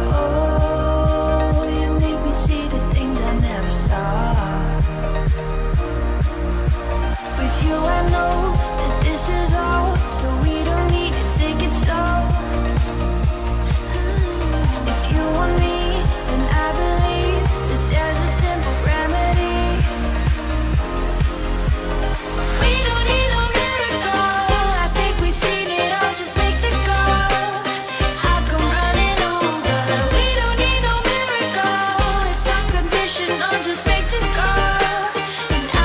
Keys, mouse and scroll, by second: 0.1 click, 0.9 f, 1.0 click, 1.3 space, 1.6 click, 2.0 scroll down 1, 2.3 ctrl+click, 3.2 ctrl+x, 3.7 space, 4.3 click, 5.2 scroll up 1, 6.1 p, 6.8 click, 7.8 middle click, 8.4 scroll down 1, 9.8 shift+x, 10.3 scroll up 1, 11.5 click, 11.8-12.2 scroll up 1, 12.2 middle click, 14.2 click, 15.4 space, 15.7 middle click, 17.2-17.7 scroll up 1, 17.9 click, 18.2 right click, 19.0 click, 19.5 scroll down 1, 20.0 shift+middle click, 22.3-25.2 middle drag, 25.2 p, 25.5 click, 27.1 space, 27.2 scroll down 1, 28.1 shift+middle click, 28.5 scroll up 1, 29.9 p, 30.5 click, 30.9 space, 31.0 scroll down 1, 32.1 middle click, 33.1-33.7 scroll up 1, 34.2-35.8 shift+middle drag.